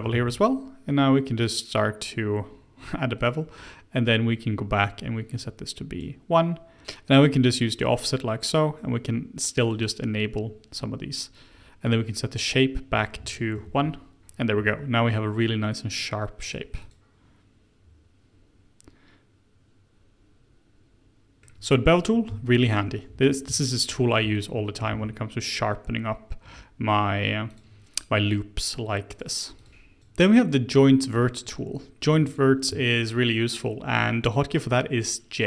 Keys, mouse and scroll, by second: 0.1 ctrl+b, 5.4-6.8 drag, 9.6-14.9 drag, 15.3-16.4 scroll up 1, 16.4-19.9 drag, 21.4-22.7 middle drag, 22.7 alt+click, 23.5 alt+click, 24.3 alt+click, 24.9 ctrl+b, 29.1 click, 30.5 scroll down 2, 30.8 middle click, 31.4-32.1 scroll down 1, 32.1 Tab, 32.2 click, 32.7 shift+middle drag, 33.0 shift+scroll down 1, 33.1-34.7 scroll up 2, 34.7 Tab.